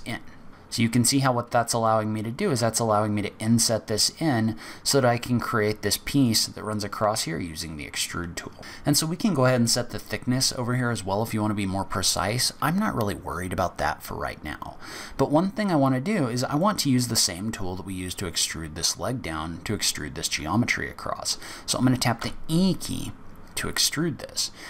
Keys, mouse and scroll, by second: 8.6 click, 13.8-14.6 scroll down 5, 15.1-15.5 scroll down 1, 15.8-16.2 scroll down 3, 16.2-18.9 scroll up 2, 16.5 middle click, 22.2 e.